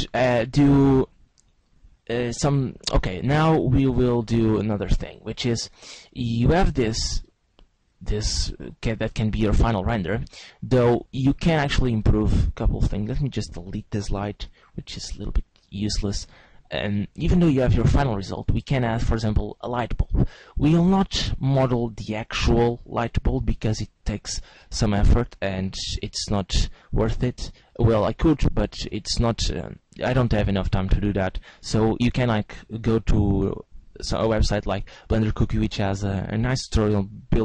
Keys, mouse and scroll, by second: 7.2 middle click, 8.2 middle click, 9.8-10.7 scroll up 4, 10.7 middle click, 13.4 right click, 14.1 x, 16.7 scroll down 1, 17.1 middle click, 18.2-19.0 scroll up 4, 20.1 middle click, 24.6 middle click.